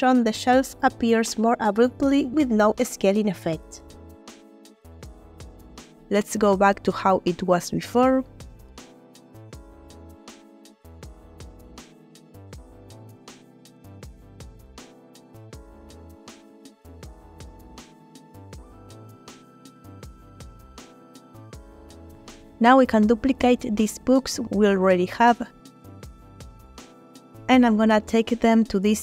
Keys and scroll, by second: 1.5 space, 6.2 g, 10.2 space, 12.0 a, 15.7 g, 19.8 space, 27.9 shift+d, 28.4 shift+Escape.